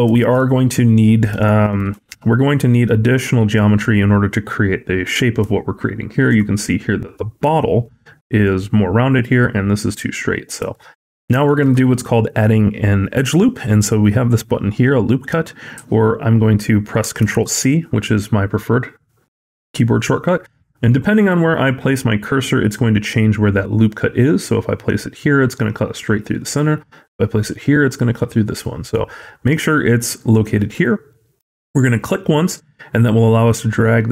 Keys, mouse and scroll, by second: 0.0 shift+middle click, 1.3 shift+middle click, 3.6 scroll down 1, 5.4 shift+middle click, 10.6 shift+middle click, 10.8 scroll up 2, 11.3 shift+middle click, 17.1 ctrl+r.